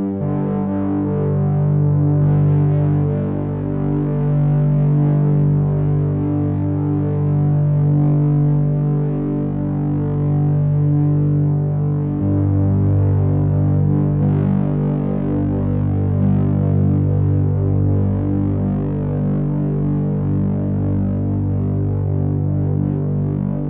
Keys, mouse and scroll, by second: 2.5 click, 4.4 click, 6.3 click, 7.5 middle click, 11.2 shift+click, 17.2 e.